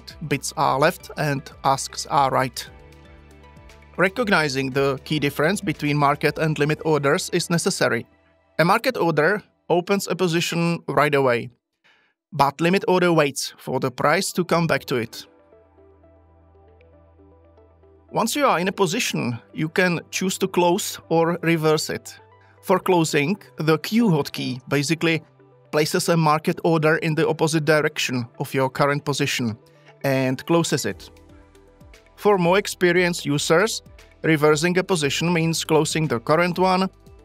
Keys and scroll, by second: 24.1 q.